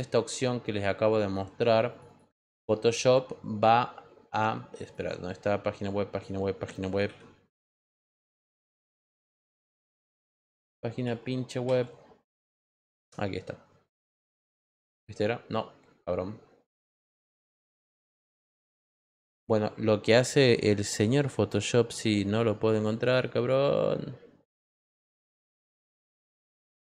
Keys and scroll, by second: 7.0 p, 7.6 p, 8.0 p, 8.3 p, 9.5 p, 10.1 p, 11.0 p, 11.6 p.